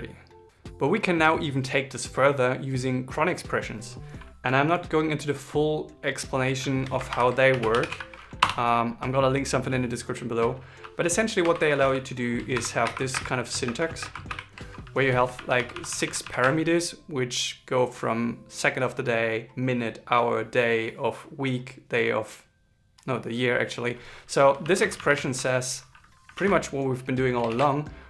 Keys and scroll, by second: 6.8 shift+Left, 11.1 shift+2, 12.4-13.9 typing, 26.1 super+s, 27.2 ctrl+shift+r.